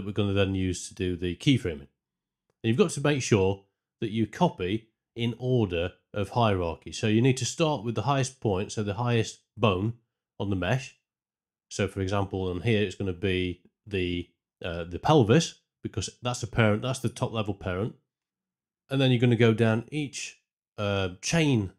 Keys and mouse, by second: 5.4 click, 8.4-10.5 drag, 12.9 click, 14.3 click, 15.7-19.3 drag.